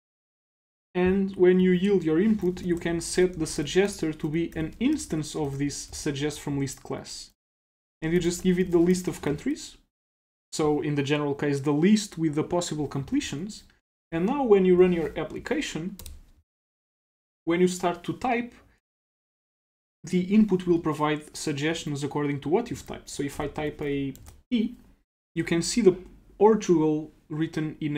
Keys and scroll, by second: 0.0 super+s, 9.3 super+s, 14.0 super+s.